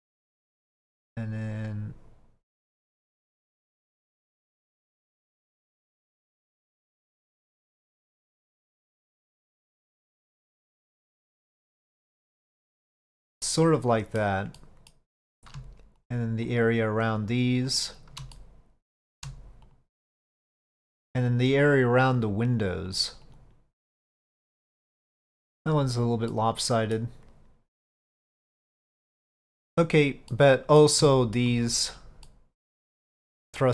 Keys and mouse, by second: 1.7 shift+click, 2.7 shift+click, 3.4-5.6 shift+drag, 5.8 shift+click, 7.6 shift+click, 8.0 shift+click, 8.6-9.6 shift+drag, 10.9 shift+click, 11.6 shift+click, 12.3 shift+click, 13.3 middle click, 14.6 middle click, 16.6 shift+click, 17.3 shift+click, 18.4 middle click, 19.8 shift+click, 20.1 shift+click, 21.4 shift+click, 21.8 shift+click, 22.3 shift+click, 23.0 shift+click, 23.5 ctrl+shift+z, 24.3 shift+click, 25.4 shift+middle click, 26.4 middle click, 28.4-29.8 middle drag, 30.4 middle click, 31.2 shift+middle click, 32.4-33.7 middle drag.